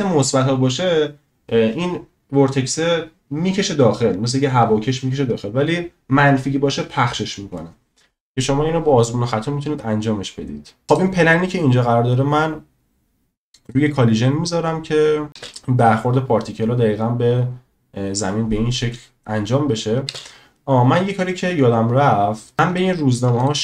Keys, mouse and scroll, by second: 13.7 click, 15.3 space, 15.5 space, 20.1 space, 22.8-23.1 shift+middle drag.